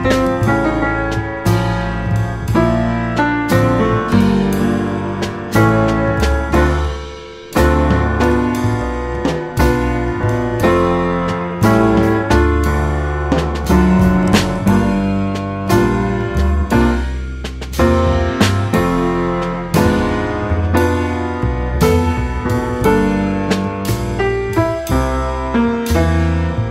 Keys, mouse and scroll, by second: 0.5 g, 2.4 middle click, 2.6 scroll up 2, 2.8-4.2 middle drag, 4.2 g, 5.2 Tab, 5.3 middle click, 5.7 click, 6.0 scroll up 1, 6.2 Tab, 6.5 Tab, 7.5 Tab, 8.3 click, 8.5-9.5 drag, 13.2 middle click, 13.5 Tab, 13.9 Tab, 14.3-16.2 middle drag, 16.2 Tab, 16.7 g, 17.5 Tab, 17.6-18.7 middle drag, 18.7 shift+click, 19.0 middle click, 19.6 x, 20.7 Tab, 21.2 Tab, 21.4 click, 21.5 click, 22.4 click, 22.9 click, 23.4 s, 25.8 scroll down 1, 25.9 middle click, 26.2 Tab, 26.5-26.7 middle drag.